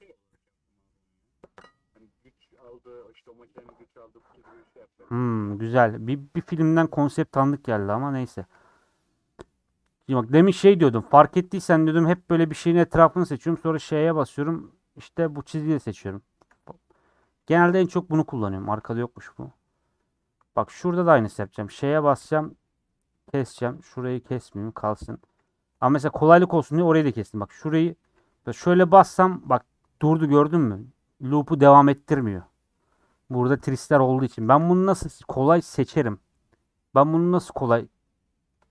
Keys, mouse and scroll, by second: 5.4 Tab, 5.6 3, 6.9 middle click, 7.9 scroll up 1, 8.6-9.0 scroll up 2, 9.0 middle click, 9.4 scroll down 5, 9.7 middle click, 9.8-10.3 scroll up 4, 10.3-12.0 middle drag, 12.0 alt+click, 13.6 ;, 15.8 click, 16.6 middle click, 16.9 scroll down 2, 17.2 middle click, 17.7 scroll up 1, 17.9 middle click, 18.7 scroll up 2, 19.0-20.2 middle drag, 20.2 3, 21.7 ;, 23.8 alt+Left, 24.3 middle click, 24.9 3, 25.1 middle click, 25.7-26.0 scroll up 4, 27.4 alt+shift+Left, 27.8 scroll down 2, 28.1 2, 28.3 alt+click, 29.4 middle click, 29.6 scroll down 1, 29.7-34.1 middle drag, 34.1-34.4 scroll down 1, 34.4-38.7 shift+middle drag.